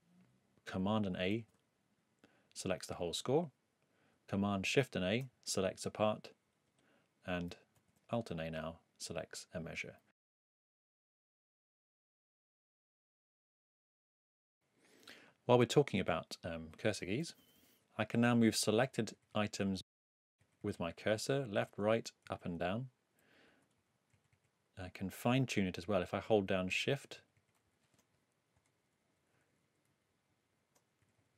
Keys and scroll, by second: 1.3 super+a, 3.3 ↺, 4.7 shift+super+a, 6.7 ⟲, 7.7 alt+a, 10.5 alt+Down, 10.9 alt+Right, 12.5 alt+Left, 13.1 alt+Down, 13.5 alt+Right, 14.0 alt+Left, 17.7 Escape, 18.8 Right, 19.5 Left, 20.4 Right, 21.2 Left, 21.6 Down, 22.2 Right, 22.5 Up, 23.2 Left, 23.8 Down, 24.1 Right, 24.7 Left, 25.4 Right, 26.0 shift+Right, 27.6 shift+Up, 28.8 shift+Up, 29.9 shift+Left, 31.0 shift+Right.